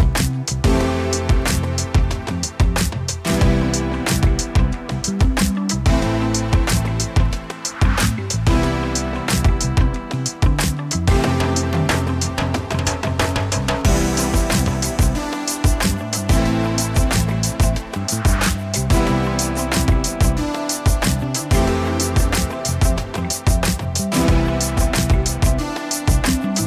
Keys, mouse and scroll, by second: 0.5 middle click, 1.1 middle click, 1.7-2.3 drag, 2.9 click, 2.9 f, 3.3-5.8 middle drag, 6.5 click, 7.3 f, 7.4-9.1 drag, 8.5 f, 9.5-11.3 drag, 10.4 f, 11.0 f, 11.3-16.8 middle drag, 17.1 click, 17.6 middle click, 18.3 click, 18.4 f, 19.7 ctrl+z, 20.1-21.3 drag, 21.3-22.9 middle drag, 23.2 h, 25.3 middle click, 26.0 click, 26.0-26.6 middle drag.